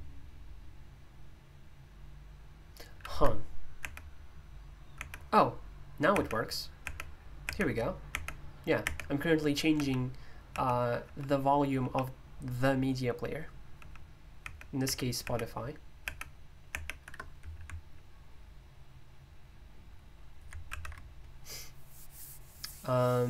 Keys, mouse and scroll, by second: 20.7 alt+super+i.